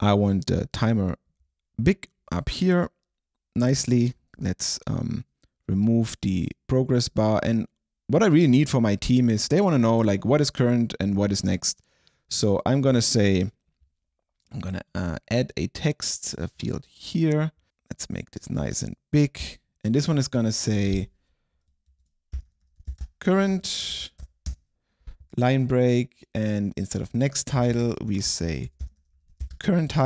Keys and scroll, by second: 21.7-24.3 typing, 23.6 Right, 24.5 Return, 27.8 alt+shift+Left, 28.5-30.0 typing.